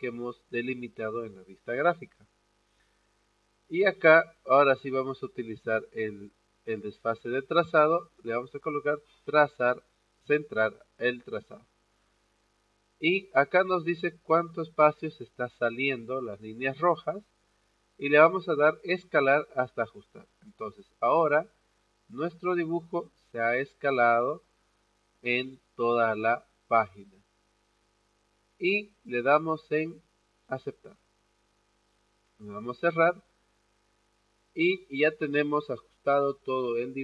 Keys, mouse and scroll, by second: 9.0 click, 18.9 click, 30.7 click, 33.1 click.